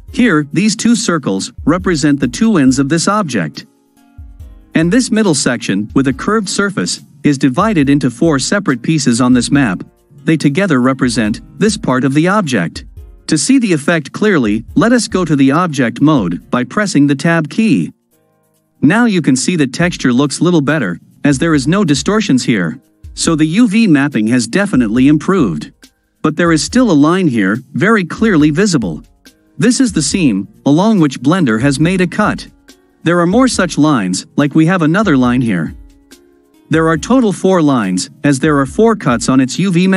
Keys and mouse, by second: 17.6 Tab, 18.9-21.4 drag, 21.4 middle click, 22.8-25.2 middle drag, 27.8-28.7 ctrl+middle drag, 30.4-33.1 middle drag, 35.4-37.8 middle drag.